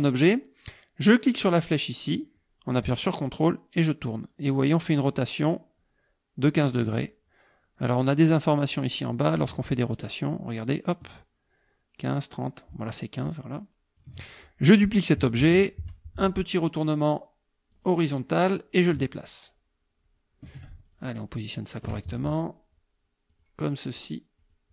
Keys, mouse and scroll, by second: 3.3 ctrl+click, 10.0-14.2 ctrl+drag, 15.4 ctrl+d, 17.7 click, 18.8-20.6 ctrl+drag, 20.9 ctrl+shift+click, 21.7 shift+click, 23.3 click, 24.4 click.